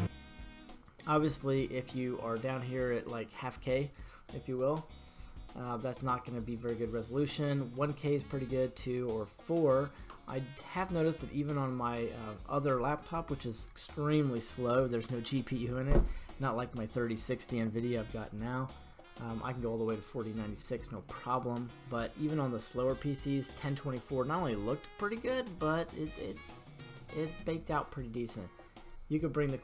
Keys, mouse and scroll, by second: 28.8-29.6 drag.